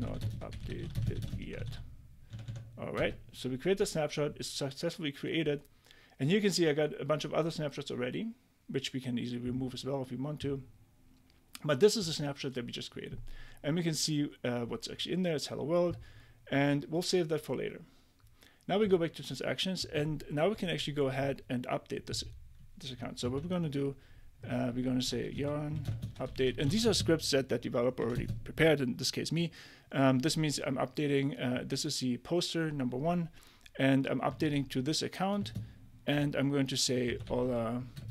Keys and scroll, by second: 0.0-2.1 typing, 2.3 Tab, 3.0 Return, 23.2 super+c, 24.8-28.1 typing, 34.4 super+v, 35.4-38.1 typing.